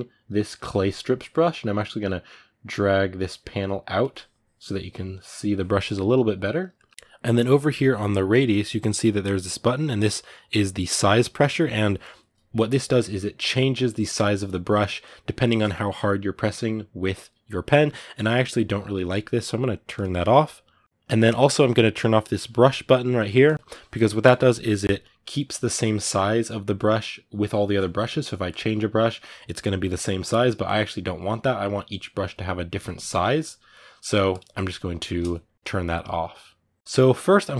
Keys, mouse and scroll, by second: 6.5-19.7 ctrl+middle drag, 19.7-32.8 drag, 32.8 f.